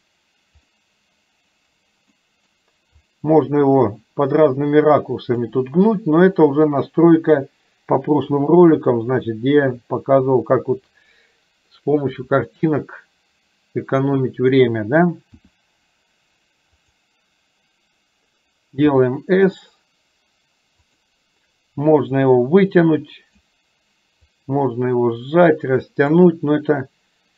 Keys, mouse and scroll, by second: 0.9-1.7 middle drag, 2.2-2.6 middle drag, 3.2-5.6 drag, 6.6 click, 8.9 KP_3, 15.5 r, 19.0 s, 22.4-23.5 drag, 24.5-26.2 drag.